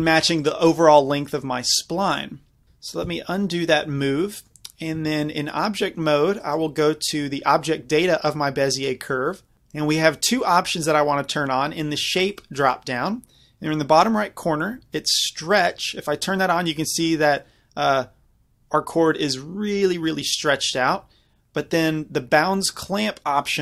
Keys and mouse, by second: 3.1 ctrl+z, 4.2-6.3 drag, 5.0 Tab, 6.4-8.5 drag, 12.3-14.9 drag, 15.6-17.4 drag, 17.4-20.2 middle drag, 23.5 click.